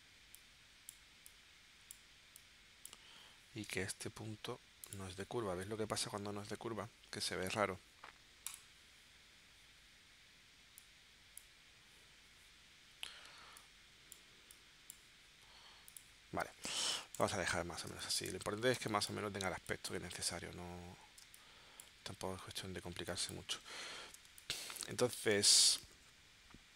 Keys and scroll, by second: 3.6 a, 16.6 space, 17.9 space, 18.7 space, 21.3 space, 23.0 space, 24.3 space.